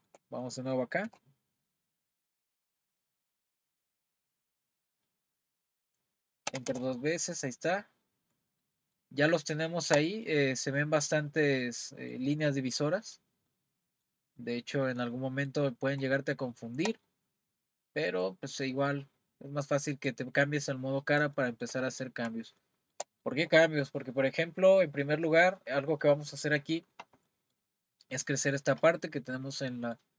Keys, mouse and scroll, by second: 1.1 r, 7.4 click, 7.9-8.6 scroll up 1, 8.6-15.7 middle drag, 15.7 scroll up 3, 16.3-18.3 shift+middle drag, 18.3 scroll down 2, 18.7-19.9 middle drag, 19.9 click, 21.4-26.3 shift+middle drag, 27.3-30.1 middle drag.